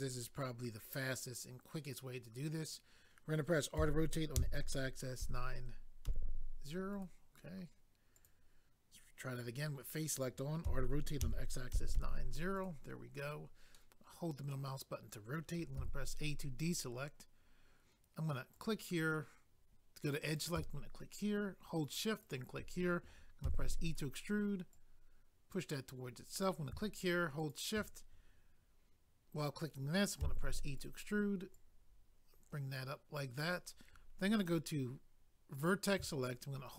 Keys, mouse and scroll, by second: 6.9 right click, 7.0 right click, 8.2 click, 8.3 click, 12.5 click, 12.6 click, 13.7 middle click, 15.8 a, 18.5 click, 18.6 click, 20.2 click, 20.4 click, 22.2 shift+click, 23.4 e, 23.9 right click, 26.3 click, 27.4 shift+click, 30.8 right click, 31.5 click, 34.4 click, 34.5 click, 35.6 click, 35.7 click.